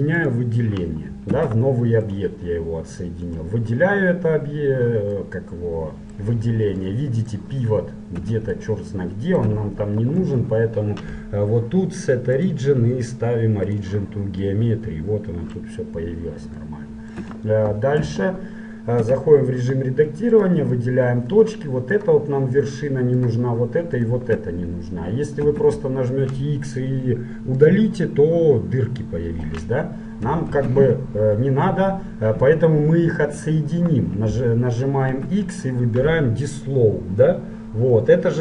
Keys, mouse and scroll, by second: 1.5 Tab, 2.2-5.3 right drag, 5.3-10.5 middle drag, 10.4 t, 11.4-12.6 middle drag, 12.6-14.4 drag, 14.6 click, 14.8-16.3 middle drag, 16.3 click, 16.7-18.4 middle drag, 18.1 t, 18.4 click, 19.2 Tab, 20.4-22.1 drag, 22.4-26.0 right drag, 25.6 x, 30.5 ctrl+z, 31.4-34.4 middle drag, 35.2 x.